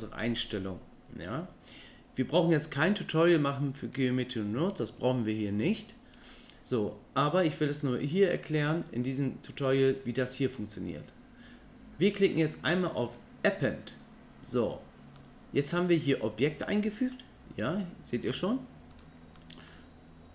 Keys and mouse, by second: 13.2-15.2 drag, 15.2-16.1 middle drag, 17.1-17.6 middle drag, 19.4-19.7 middle drag.